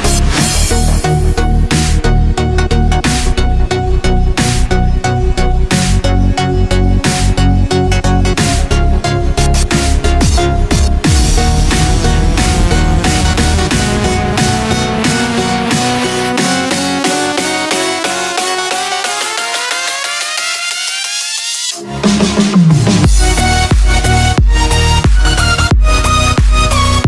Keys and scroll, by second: 0.0 x, 0.6 9, 3.5 ctrl+z, 3.9 4, 4.6 x, 7.9 z, 8.6 ctrl+z, 8.8 x, 9.9 z, 11.3 x, 12.4 z, 15.0 x, 16.7 4, 18.4 x, 19.1 space, 20.2-23.1 typing, 20.5 ctrl+space, 21.9 ctrl+z, 25.5 z, 26.5 x.